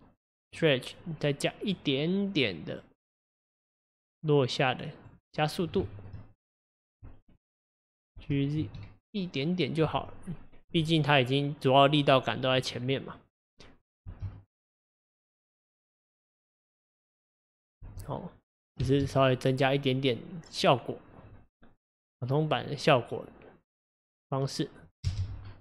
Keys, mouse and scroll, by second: 0.5 click, 1.7-5.1 drag, 5.5-5.9 scroll up 2, 5.9-6.7 shift+middle drag, 6.7 click, 7.4 click, 8.3 g, 10.2-12.5 scroll down 3, 13.1-13.8 scroll down 2, 13.8 click, 14.1 space, 17.9 space, 18.4 click, 18.9 space, 20.5-21.3 scroll down 1, 25.1 space.